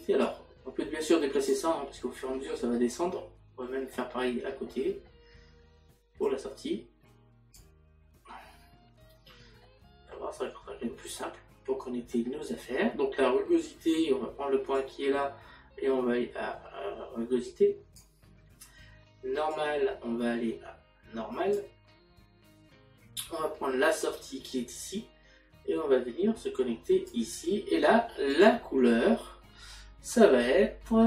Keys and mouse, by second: 6.3 click, 9.6 middle click, 12.1 middle click, 24.5 click.